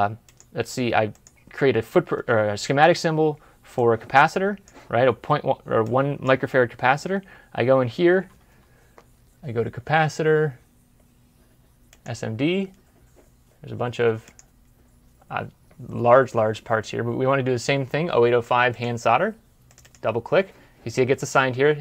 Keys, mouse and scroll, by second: 7.1 scroll down 1, 7.5-7.9 scroll up 1, 13.1-13.6 scroll up 1, 13.6 scroll down 1, 14.7 scroll up 1, 15.3-15.6 scroll down 1, 19.7 scroll down 1, 19.7 double click.